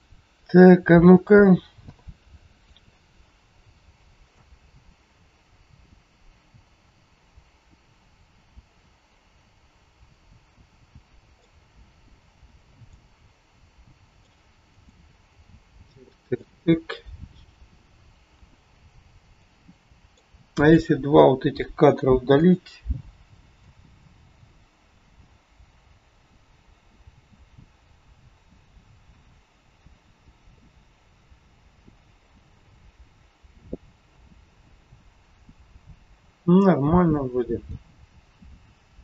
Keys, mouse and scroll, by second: 0.4 a, 1.7 i, 4.3 click, 11.3 click, 20.1 click, 21.8 Delete, 23.7 click.